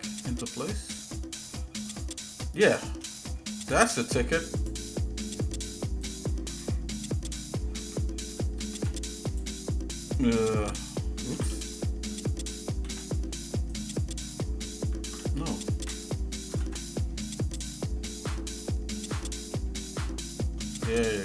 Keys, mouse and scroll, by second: 3.2 middle click, 4.6 click, 6.0 alt+shift+click, 6.9 shift+middle click, 8.6 alt+n, 11.3 ctrl+z, 12.8 alt+m, 15.0 ctrl+z, 16.5 alt+m, 18.2 scroll down 1, 18.7 shift+middle click, 19.2 middle click, 19.8 shift+middle click, 20.9-21.2 shift+middle drag.